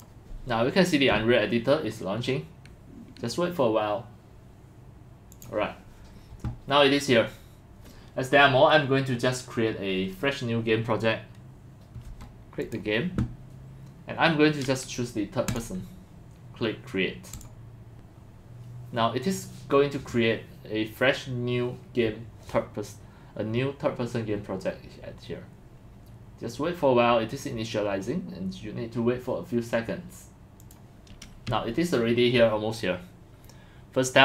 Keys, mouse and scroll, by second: 5.3 click, 12.6 click, 15.5 click, 17.4 click, 30.6 click, 30.9 click.